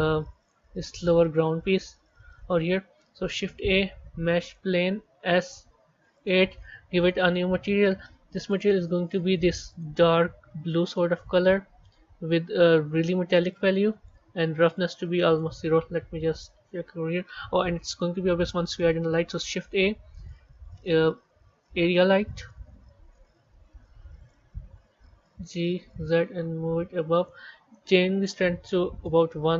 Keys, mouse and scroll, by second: 3.2 shift+a, 5.1 s, 6.8-8.4 drag, 11.5-12.7 scroll down 3, 13.4-16.1 drag, 16.1 z, 17.0-17.5 scroll down 3, 17.5-19.2 middle drag, 19.2 shift+a, 25.2 g, 28.0-29.0 drag, 29.0 KP_0, 29.2 KP_0.